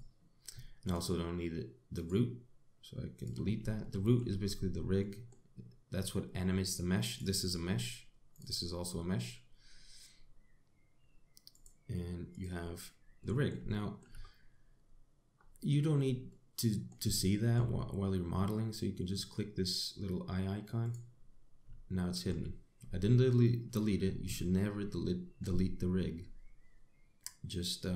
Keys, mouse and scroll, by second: 0.0 x, 1.5 click, 2.6 right click, 4.4 shift+middle click, 5.1-5.6 scroll up 2, 5.6 middle click, 6.4 scroll up 1, 7.8 click, 9.0 click, 12.2 click, 12.9 click, 13.8 middle click, 14.4 shift+middle click, 14.8-15.3 scroll up 6, 16.0-16.8 scroll down 7, 16.9 middle click, 17.9 shift+middle click, 21.5 click, 22.6 shift+middle click.